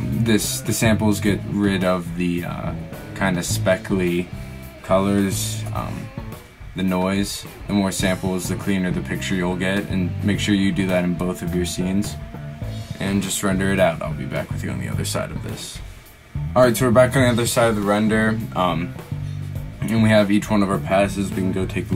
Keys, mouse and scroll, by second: 2.1 right click, 4.9 right click, 12.2 click, 21.6 Escape.